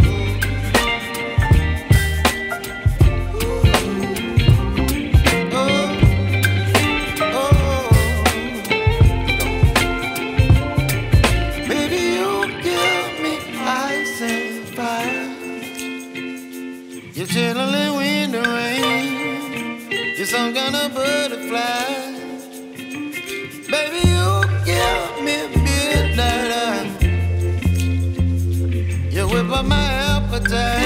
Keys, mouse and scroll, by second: 0.7-3.1 drag, 4.3 click, 5.6-8.6 drag, 10.1-14.2 drag, 15.5 ctrl+s, 16.6-17.1 drag, 17.1-17.5 scroll down 3, 17.5-18.3 middle drag, 18.3-18.8 scroll down 10, 19.7 KP_3, 20.8 drag, 22.5 click, 24.8-27.9 right drag, 29.8 o.